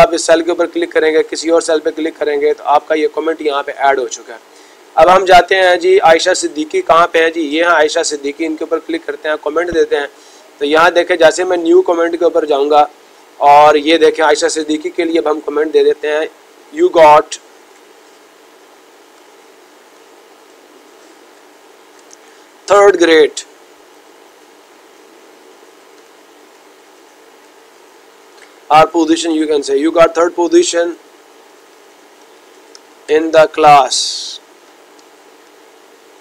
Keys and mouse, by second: 0.3-1.4 drag, 7.9-9.0 drag, 11.5-12.5 drag.